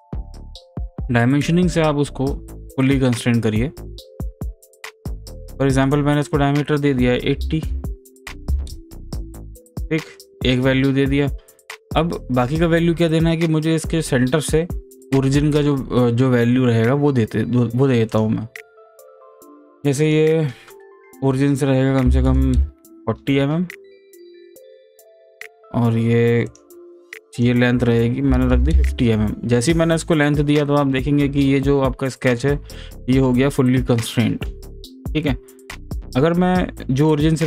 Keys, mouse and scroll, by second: 1.7 click, 4.2 click, 18.1 click, 19.1 click, 25.3 click, 26.6 click, 29.1 click, 36.0 click.